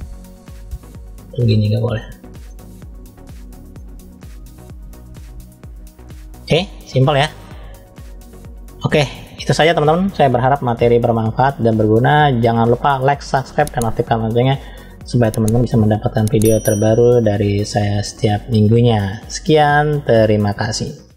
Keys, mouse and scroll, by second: 1.0 click, 2.3 middle click, 3.3-3.7 scroll down 1, 3.7-5.7 middle drag, 6.5 click, 8.5-8.8 scroll down 1, 8.8 middle click, 10.5 middle click, 11.3 shift+middle click, 13.2 middle click, 14.2-14.9 scroll up 2, 15.1-20.5 middle drag.